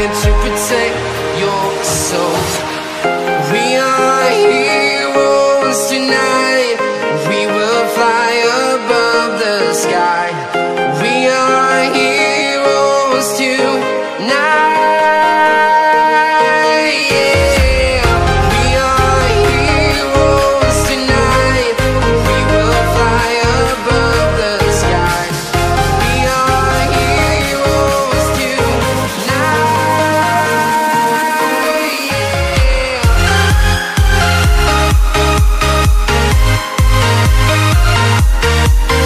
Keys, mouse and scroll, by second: 0.0-3.1 typing, 0.5 Down, 3.3 Return, 4.4 click, 6.0 alt+Tab, 7.1 v, 8.5-9.9 typing, 11.1 Left, 13.0 BackSpace, 13.6 /, 13.8 Right, 15.7 space, 16.0 Tab, 17.3-21.2 typing, 22.5 Return, 23.8 click, 25.8-27.9 typing, 28.3 Return, 29.1 click, 29.7-31.6 typing, 31.1 Down, 32.8 w, 33.1 shift+Left, 34.3 c, 34.5 Tab, 35.7 v, 36.1 space, 37.1 typing, 38.7-39.0 typing.